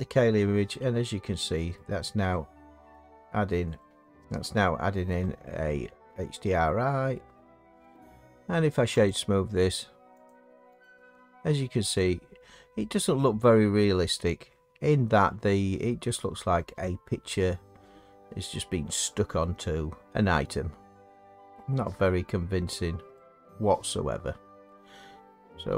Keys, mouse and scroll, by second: 0.9-1.3 drag, 1.7 click, 1.8-2.2 middle drag, 3.0-6.1 middle drag, 7.3 middle click, 7.9 right click, 9.1 click, 10.3 click, 10.8 right click, 12.0 click, 13.9 middle click, 20.1 middle click, 21.5 middle click, 24.9 middle click.